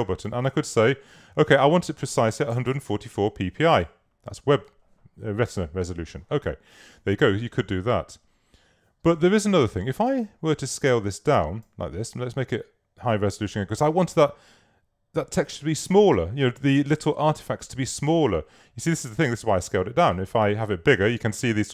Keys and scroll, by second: 2.3-3.2 typing.